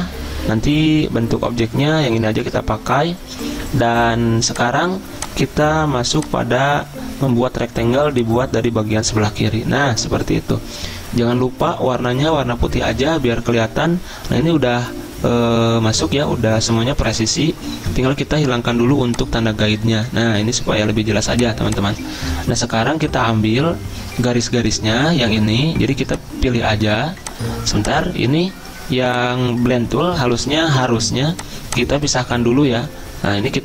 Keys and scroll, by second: 30.3 ctrl+z.